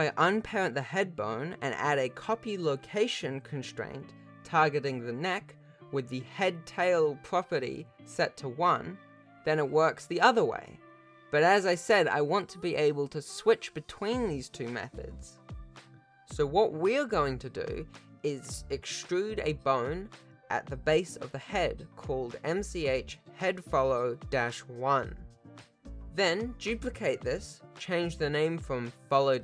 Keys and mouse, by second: 0.4 shift+middle drag, 2.0 shift+click, 4.5 ctrl+Tab, 5.8 click, 8.1 click, 8.8 r, 14.2 x, 15.0 shift+middle click, 15.3 Tab, 16.0-17.1 drag, 17.1 e, 19.4 click, 21.1 F2, 26.0 l, 27.8 shift+d, 29.0 s.